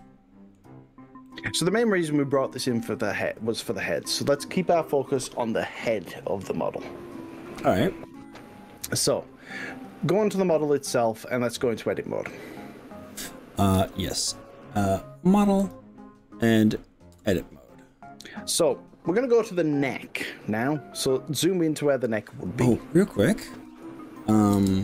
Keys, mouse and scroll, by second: 1.3-4.8 middle drag, 8.1 middle click, 9.9-13.3 middle drag, 15.7 click, 17.3 Tab, 24.7 Tab.